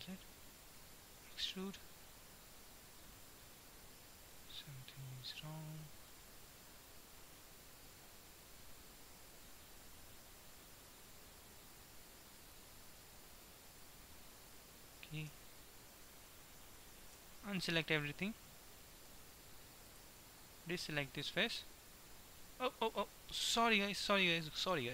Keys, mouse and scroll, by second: 1.5 e, 4.5 ctrl+z, 5.2-6.5 middle drag, 12.0-14.8 middle drag, 15.3 s, 17.2 a, 17.7 middle click, 18.3 a, 18.7-19.0 scroll down 1, 19.8-21.8 right drag, 21.8 e, 24.3 ctrl+z.